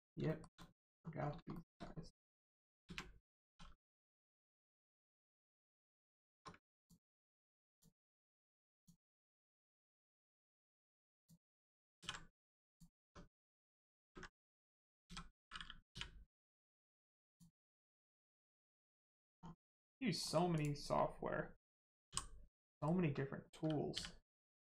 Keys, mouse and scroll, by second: 0.2 shift+middle click, 0.5 middle click, 0.6 middle click, 0.7 scroll down 1, 0.9-1.3 scroll up 1, 1.4 shift+middle click, 2.7 ctrl+middle click, 2.8 ctrl+space, 3.4 2, 4.2 shift+middle click, 6.7 ctrl+click, 7.6 ctrl+click, 8.7 ctrl+click, 9.5 ctrl+click, 10.3 ctrl+click, 11.1 ctrl+click, 11.9 ctrl+e, 12.6 click, 13.5 Tab, 13.9 ctrl+space, 17.2 click, 18.3 scroll down 1, 18.3 Tab, 18.8 middle click, 19.0-19.5 scroll down 1, 19.5 middle click, 20.5 click, 22.0 h, 22.5 middle click, 24.4 middle click.